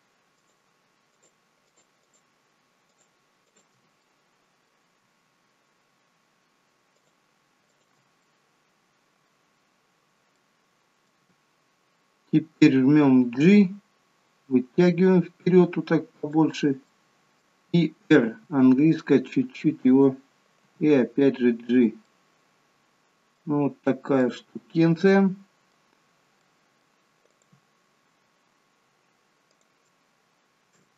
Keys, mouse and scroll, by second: 0.4 shift+click, 1.1 shift+click, 1.6 shift+click, 2.0 shift+click, 2.9 shift+click, 3.5 shift+click, 4.0 middle click, 6.9 shift+click, 7.7 shift+click, 8.2 middle click, 9.5-10.3 scroll down 4, 10.3 middle click, 13.4 g, 16.8 middle click, 18.4 r, 20.6 g, 22.0 middle click, 23.6-24.2 scroll up 3, 24.2 middle click, 26.2 scroll down 1, 26.4 middle click, 27.4 click, 29.5 click.